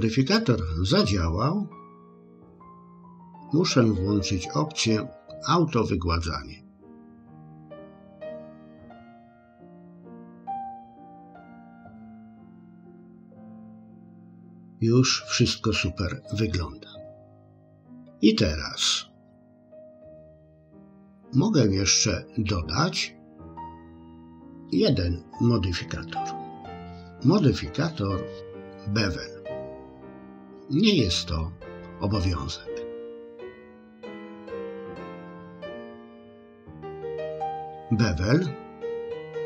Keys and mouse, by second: 2.4 click, 7.0 click, 11.1 click, 20.7 click, 23.4 click, 34.3-36.1 drag.